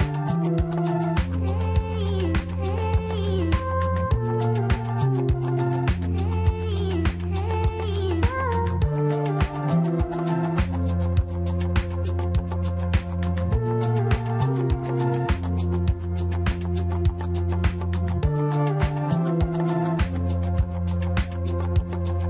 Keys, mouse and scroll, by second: 2.9-3.6 scroll down 3, 3.6-4.2 shift+middle drag, 4.2 click, 4.7-5.4 scroll up 2, 5.4 click, 7.4 shift+d, 20.4 shift+d.